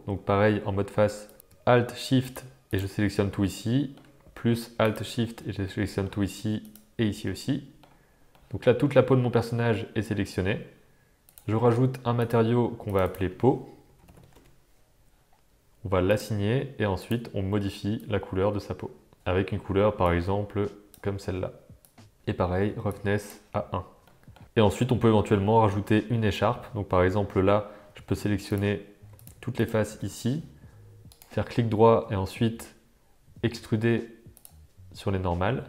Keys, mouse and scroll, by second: 1.2 click, 2.2 shift+click, 2.6 shift+click, 3.4 middle click, 5.6 middle click, 6.6 shift+click, 7.2 middle click, 8.3-10.3 middle drag, 11.2 click, 12.1 click, 12.8 click, 13.0-15.0 drag, 16.1-19.2 drag, 19.2 Tab, 22.8 click, 24.0-24.3 middle drag, 25.3 middle click, 25.8 Tab, 26.2 middle click, 28.5 click, 29.2 shift+click, 31.2-35.6 drag.